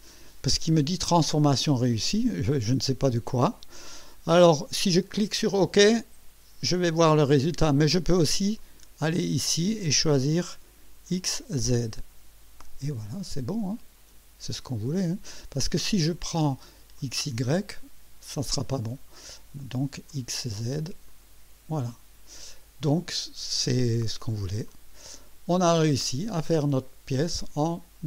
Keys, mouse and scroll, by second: 8.6 click, 11.0 click, 16.1 click, 16.9 click, 20.1 click, 21.0 click, 24.6 click, 27.2-28.0 drag.